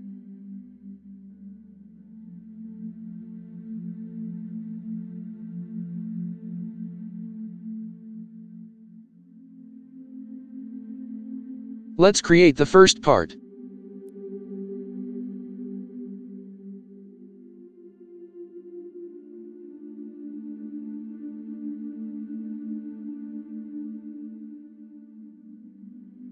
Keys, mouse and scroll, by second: 0.2 KP_0, 0.4 KP_Decimal, 0.6 KP_3, 5.8 KP_0, 5.9 KP_3, 8.9 KP_0, 9.0 KP_7, 18.7 Delete, 20.7 ctrl+v, 21.9 Return, 26.2-26.3 scroll up 2.